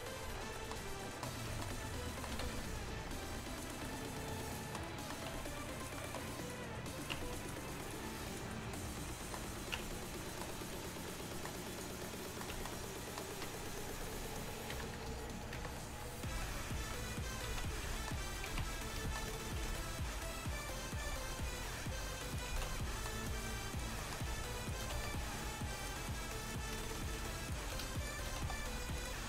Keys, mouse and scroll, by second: 0.3 z, 2.4 a, 2.6 a, 3.1 s, 5.7 s, 6.5-8.8 drag, 7.2 Tab, 9.8 Tab, 14.8 KP_1, 15.1 KP_3, 15.6 KP_1, 16.4 z, 17.5 z, 18.5 z, 19.7 b, 21.1 g, 22.6 z, 25.0 s, 28.4 s.